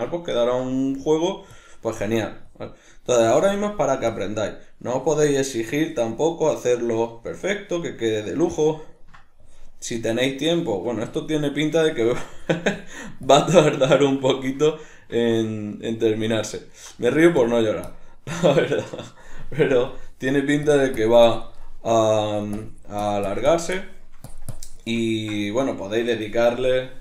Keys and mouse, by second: 1.6-1.9 drag, 1.9-2.5 middle drag, 2.5 click, 2.8-3.3 middle drag, 3.3-3.7 drag, 3.7-4.1 middle drag, 4.1-4.5 drag, 4.5-5.0 middle drag, 5.0-5.4 drag, 5.4-7.4 middle drag, 7.4-7.8 drag, 7.8-9.4 middle drag, 9.4-10.0 drag, 10.0-11.2 middle drag, 11.2-11.6 drag, 11.6-12.4 shift+middle drag, 12.4-14.0 drag, 14.0-17.1 ctrl+middle drag, 17.1-21.6 drag, 21.6-22.3 middle drag, 22.3-23.7 drag, 23.7-24.3 shift+middle drag, 24.3-25.0 drag, 25.0-26.5 ctrl+middle drag, 26.5-27.0 drag.